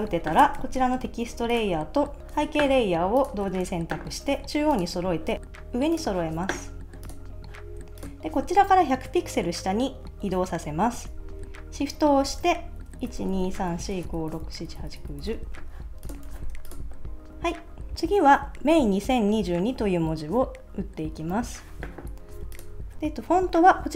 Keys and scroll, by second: 13.1 shift+Down, 14.3 shift+Down, 16.3 super+s.